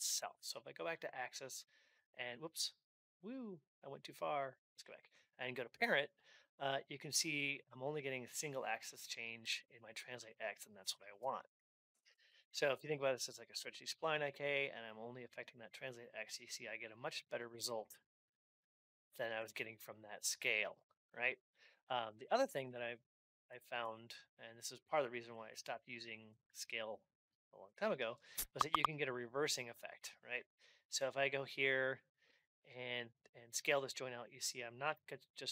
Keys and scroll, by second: 10.9 Down, 11.2 ctrl+Up, 22.3 ctrl+Up.